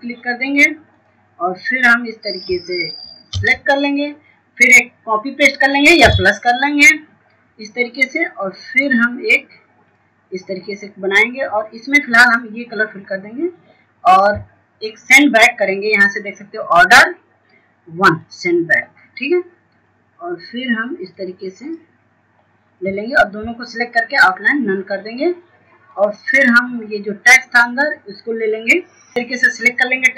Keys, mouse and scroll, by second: 10.7 scroll up 1, 12.0 click, 13.5 scroll down 1, 15.3 click, 16.1-16.5 scroll up 1, 18.3 click, 23.3 scroll up 1, 24.4 click, 25.4 scroll down 1, 26.4 shift+click, 27.7 right click, 28.4-29.2 scroll down 1, 29.2-30.1 drag.